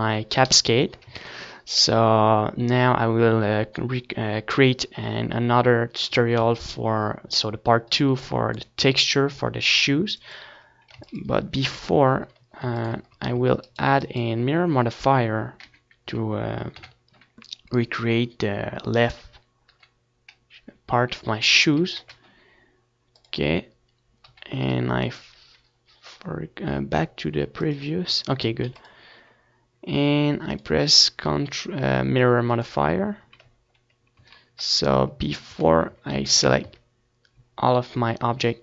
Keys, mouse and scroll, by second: 2.4 ctrl+s, 4.8-8.7 middle drag, 6.2-8.0 drag, 7.0 ctrl+s, 7.7 KP_7, 8.7 ctrl+s, 9.5 c, 9.9-12.0 right drag, 11.8 t, 12.1 t, 13.0 n, 15.5-17.2 middle drag, 16.0 n, 17.2 n, 17.6 n, 18.3 t, 19.6-21.3 drag, 20.8 t, 21.1 t, 22.0 n, 24.3 click, 25.3 ctrl+s, 29.9 z, 30.2-34.4 middle drag, 30.9 ctrl+z, 32.3 z, 32.6 a, 32.9 z, 33.4 a, 36.5 ctrl+j, 37.4 z, 37.6-38.6 middle drag.